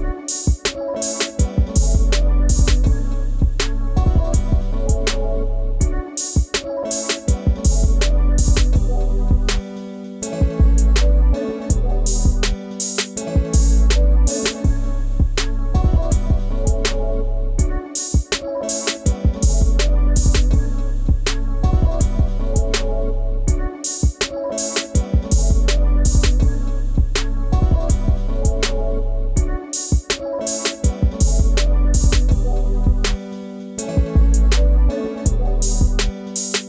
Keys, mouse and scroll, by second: 5.7 double click, 6.9 ctrl+g, 8.3 ctrl+g, 9.5 ctrl+g, 10.1 ctrl+space, 10.2 ctrl+click, 10.4 ctrl+space, 11.5 scroll down 1, 13.9 double click, 18.6 double click, 20.8 double click, 26.0 double click, 29.9 scroll up 1, 30.5 space, 30.6 ctrl+l, 32.4 ctrl+g, 35.1 ctrl+g, 35.9 scroll down 1, 36.0 ctrl+space, 36.1 ctrl+click, 36.4 ctrl+space.